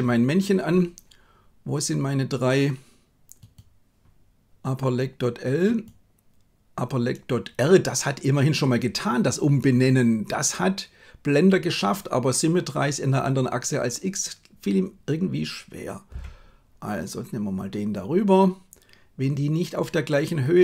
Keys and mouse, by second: 5.7 right click, 16.0 g.